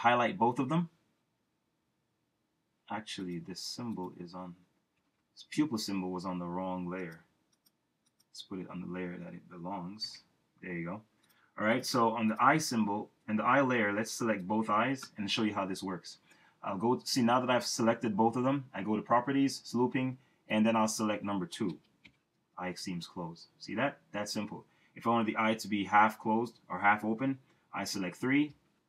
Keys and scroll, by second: 5.0 super+x, 10.0 shift+super+v, 21.7 2, 22.0 Return.